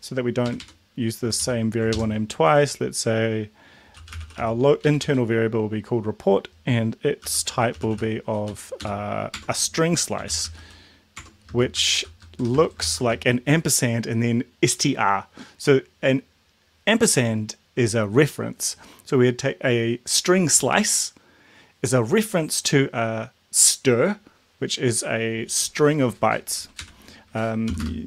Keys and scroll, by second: 0.5 Right, 0.6 Right, 1.3 Left, 1.3 Left, 1.8 ctrl+shift+Left, 3.7-4.8 typing, 5.0 Right, 6.9-8.4 typing, 8.4 End, 8.8 Down, 9.3 Tab, 10.0-12.9 typing, 11.2 Tab, 26.8 Right, 27.7 ,, 27.8 space.